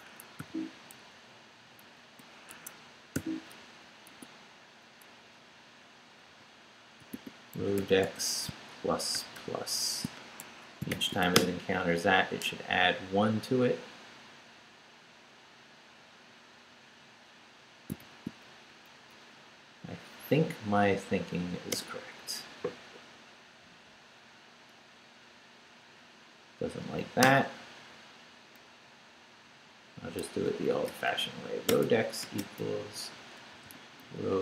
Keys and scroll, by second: 0.0 Escape, 0.4 u, 1.4 Down, 2.5 Escape, 3.1 o, 4.1 Tab, 6.3-9.1 typing, 10.4 shift+Escape, 10.9 shift+;, 11.2 shift+w, 11.3 Return, 18.0 shift+;, 18.7 shift+Up, 21.7 Return, 27.2 Return, 30.2-32.4 typing, 34.0-34.4 typing.